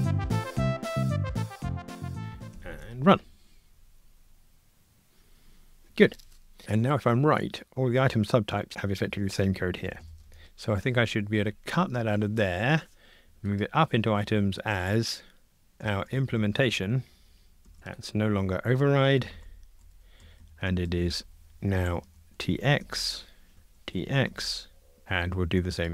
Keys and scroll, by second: 0.3 Return, 2.0 super+BackSpace, 2.5 ctrl+r, 11.8 super+x, 17.7 super+v, 19.2 Delete, 20.9 alt+shift+Right, 22.8 Escape.